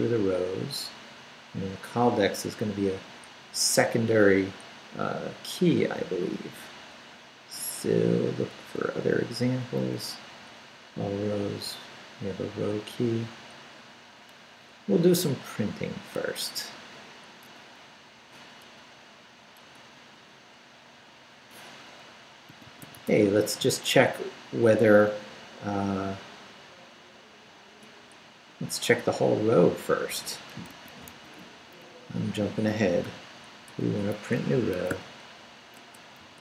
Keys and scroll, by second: 8.9 Up, 10.0 Down, 18.8 BackSpace, 22.2-23.5 typing, 28.2 BackSpace, 30.3-31.2 typing, 31.5 Up, 33.0 shift+p, 33.7 BackSpace, 34.7 Escape, 34.9 o, 35.9-36.4 typing.